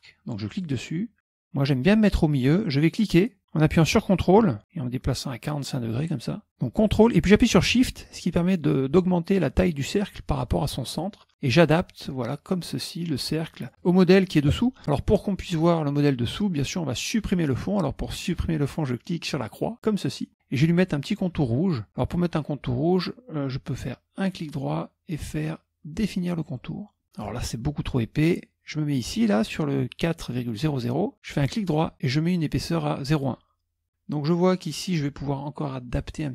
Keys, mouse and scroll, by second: 0.6 click, 2.7-3.8 drag, 5.6 ctrl+click, 8.1-13.9 ctrl+shift+drag, 19.8 click, 24.4 right click, 26.5 click, 33.2 click.